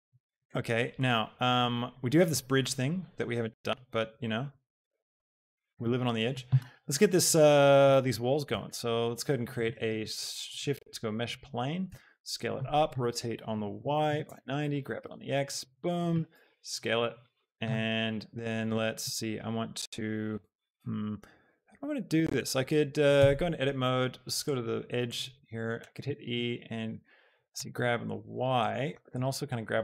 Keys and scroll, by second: 10.4 a, 11.8 s, 12.9-15.1 typing, 14.4 Return, 16.2 z, 23.2 Tab, 25.8 e, 26.1 Escape, 27.6 y, 29.1 x.